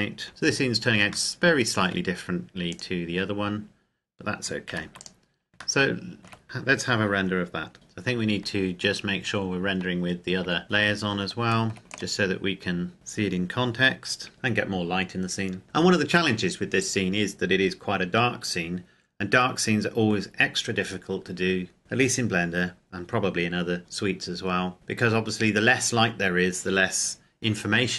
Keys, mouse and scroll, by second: 0.3 click, 1.5 shift+middle click, 2.7 right click, 4.8 ctrl+s, 5.1 click, 5.8 shift+middle click, 6.4 ctrl+click, 8.7 Escape, 11.8 click, 14.3 F12.